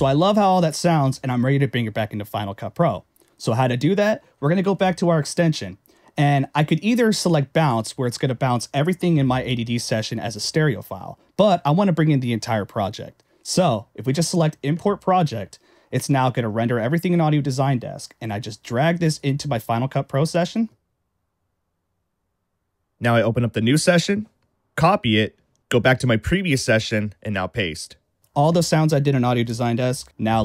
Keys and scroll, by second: 24.6 super+a, 25.0 super+c, 27.9 super+v.